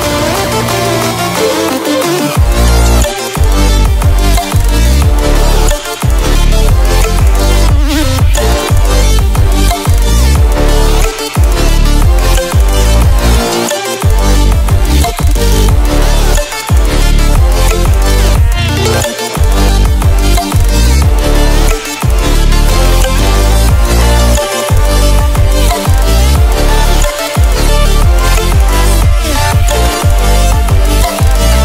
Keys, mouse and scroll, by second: 0.4 ctrl+alt+scroll up 1, 2.1 click, 2.9 Up, 4.7 ctrl+alt+scroll down 1, 5.2 ctrl+click, 5.8 ctrl+alt+scroll down 1, 6.6 ctrl+alt+scroll down 1, 7.1 ctrl+alt+scroll up 1, 10.4 ctrl+alt+Num_Lock, 10.4-11.0 ctrl+alt+scroll up 2, 11.7 ctrl+alt+scroll up 1, 12.0 ctrl+alt+scroll down 1, 12.4 ctrl+alt+scroll up 1, 15.2-15.8 click, 16.2 Delete, 17.4-21.8 drag, 24.5-24.8 ctrl+alt+scroll down 1, 25.2 ctrl+alt+scroll up 1, 26.1-31.6 drag.